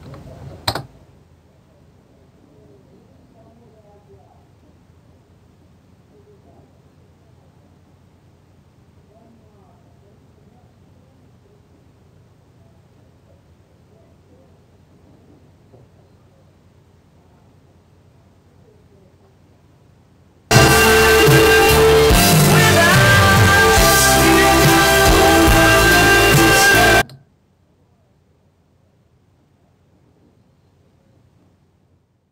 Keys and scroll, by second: 0.5 Down, 0.7 Return.